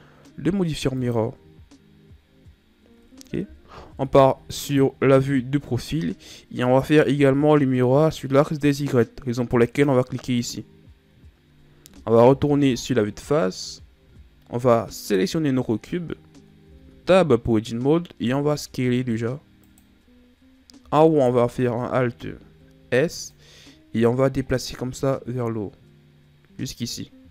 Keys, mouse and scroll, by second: 3.6 KP_3, 9.5 click, 12.1 KP_1, 13.6-14.8 shift+scroll up 3, 14.8 right click, 16.5 Tab, 18.1 s, 21.0 alt+right click, 23.2 click.